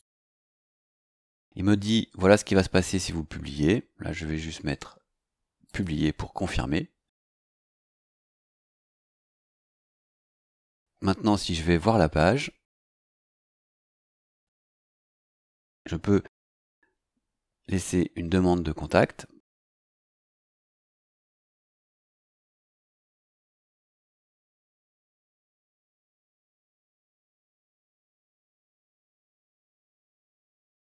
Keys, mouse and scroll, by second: 5.6 click, 12.2 click, 14.9-15.5 scroll down 2, 15.5 click, 19.5-28.5 typing, 29.7-30.9 typing.